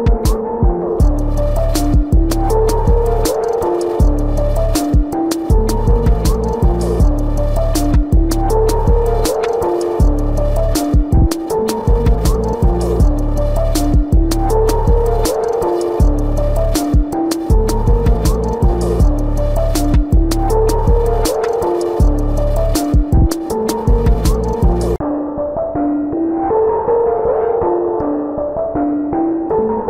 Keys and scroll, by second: 0.0-4.6 typing, 6.3 space, 7.1 space, 9.5 space, 12.6 ctrl+alt+z, 13.0 ctrl+alt+z, 13.9 space, 14.9 space, 15.3 space, 16.2 space, 17.9 space, 18.4 space, 19.7 space, 20.8 space, 21.6 space, 22.8 ctrl+alt+z, 24.0 ctrl+alt+z, 25.6 space, 26.6 space, 27.3 ctrl+alt+z, 29.4 space.